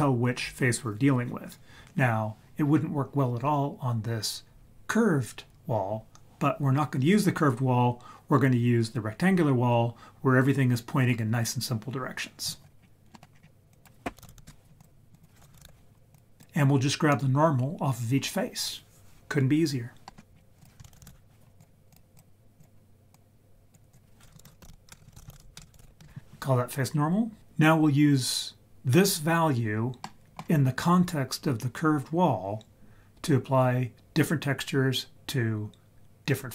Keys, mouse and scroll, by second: 12.8 scroll down 2, 12.9 scroll up 1, 13.1 middle click, 13.2 scroll down 1, 13.3-13.9 scroll up 5, 13.7-14.8 drag, 15.1-16.4 drag, 20.1 middle click, 20.3 scroll down 2, 20.6 click, 20.8 shift+a, 21.0 s, 22.1 click, 23.1-23.7 drag, 23.9 click, 25.0 BackSpace, 25.6 BackSpace, 30.0 middle click.